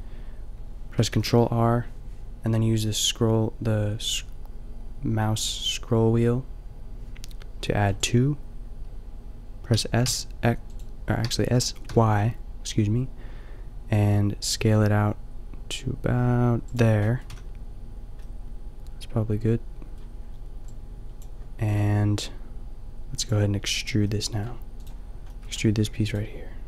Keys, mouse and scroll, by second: 1.1 ctrl+r, 9.7 s, 17.3 a, 22.2-25.3 drag, 25.3 middle click, 25.8 g.